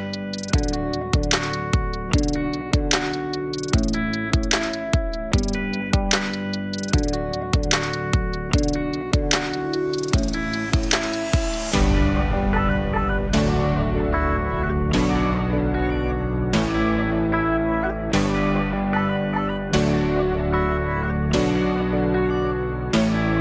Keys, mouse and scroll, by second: 0.1-1.9 scroll up 1, 1.9 click, 2.1 shift+a, 5.6-8.1 drag, 9.3 click, 9.9 click, 11.3-12.1 alt+drag, 12.1 Tab, 14.8 alt+middle click, 20.7 e.